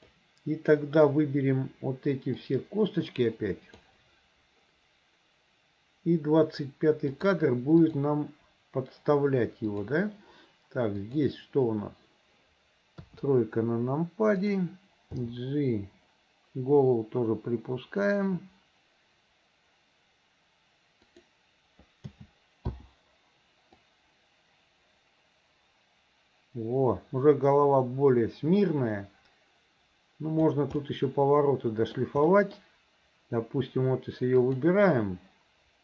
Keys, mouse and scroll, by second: 2.4-3.9 drag, 7.2 click, 7.9 click, 9.8 click, 11.1 click, 13.1 KP_3, 14.4 click, 15.3 g, 22.1 a, 22.7 i, 23.9-30.5 drag, 30.8-32.0 middle drag, 32.3 middle drag, 34.4 click.